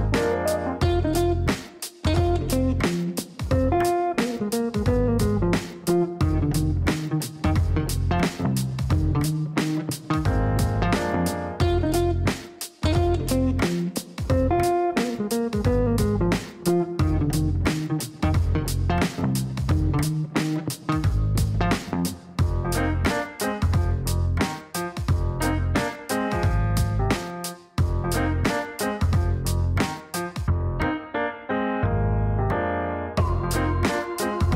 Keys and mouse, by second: 0.0-0.9 typing, 1.3 Down, 2.8 space, 2.9 KP_Add, 3.0 space, 7.1-7.9 typing, 9.3-10.4 typing, 10.4 Down, 10.6 Down, 10.8 Down, 10.9 Down, 11.1 Down, 11.6 Return, 13.2 click, 14.7 click, 15.7 click, 16.6 click, 17.3 click, 23.1 click.